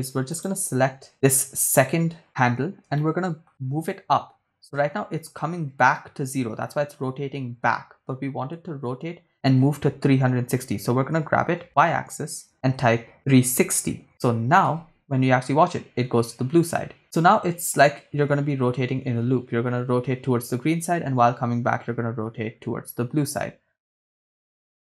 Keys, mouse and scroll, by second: 0.3 click, 0.3 right click, 1.1 shift+right click, 3.0 shift+middle click, 11.4 g, 11.6 y, 13.4 3, 13.4 6, 13.6 0, 14.1 Return, 14.8 shift+space.